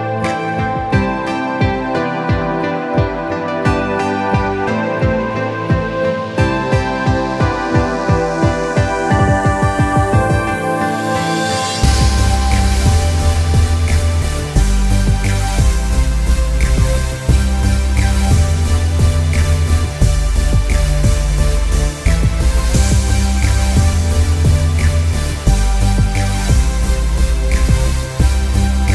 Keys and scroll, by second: 14.9 p.